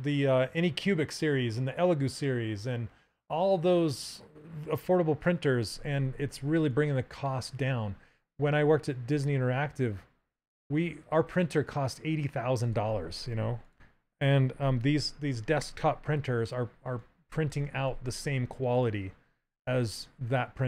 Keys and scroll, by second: 13.2 ctrl+z.